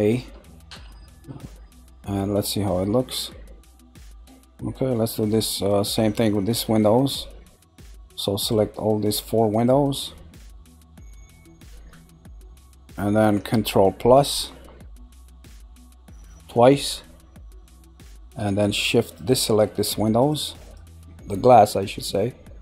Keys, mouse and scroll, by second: 2.4 Tab, 4.1 Tab, 4.6-5.6 middle drag, 5.6-6.4 scroll down 1, 6.4 middle click, 7.8 shift+click, 8.4 shift+click, 9.1 shift+click, 9.5 click, 11.5 shift+click, 17.4 scroll, 18.6 typing, 18.6 shift+click, 19.0 shift+click, 19.5 scroll down 1, 20.2 shift+click, 20.6 shift+click.